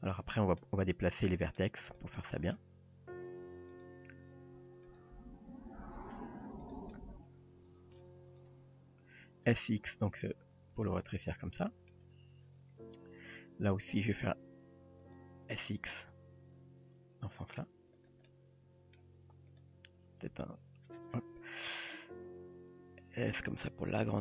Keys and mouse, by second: 0.3-0.6 middle drag, 1.3-1.6 middle drag, 1.9 click, 2.2-2.6 middle drag, 3.1 e, 4.4 r, 5.0 g, 7.0 middle click, 8.5 drag, 9.2 s, 11.1-11.9 middle drag, 15.8 s, 18.3 middle click, 19.5 click, 20.3 x, 22.8 s.